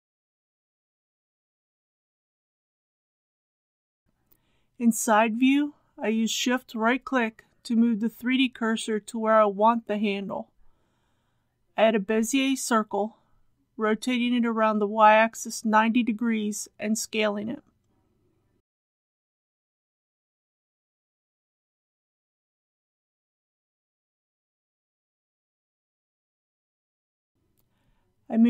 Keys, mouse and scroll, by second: 2.9 ctrl+a, 4.2 KP_3, 10.0 shift+right click, 12.8 shift+a, 15.1 click, 16.4 r, 18.2 KP_9, 18.4 KP_0, 19.4 s, 21.6 click, 21.9 g, 22.1 z, 26.2 click, 27.1 KP_1, 27.5 g, 27.7 x.